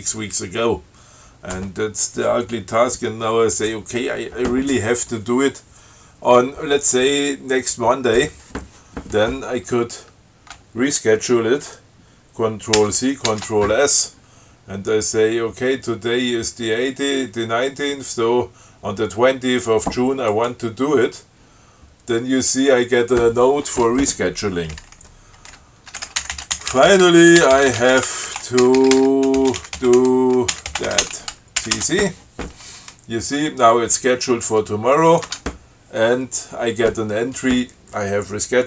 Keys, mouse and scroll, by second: 13.1 ctrl+c, 13.6 ctrl+s, 20.6 click, 26.1-31.8 typing, 32.1 ctrl+c, 35.4 click, 35.6 Tab.